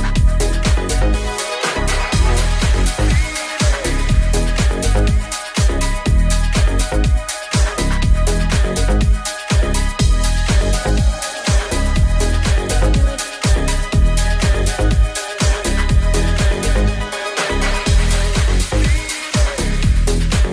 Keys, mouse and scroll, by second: 6.1 right click, 7.6 ctrl+s, 9.3 middle click, 9.8-12.2 middle drag, 12.2 click, 12.8 shift+click, 13.5 shift+d, 19.8 g, 19.8 w.